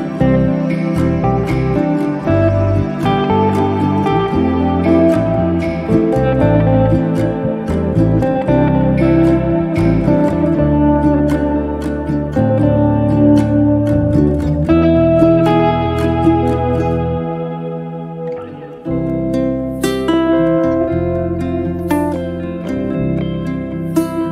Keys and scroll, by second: 4.5 0, 5.3 KP_Decimal, 6.5 1, 8.4 KP_Decimal, 8.7 1.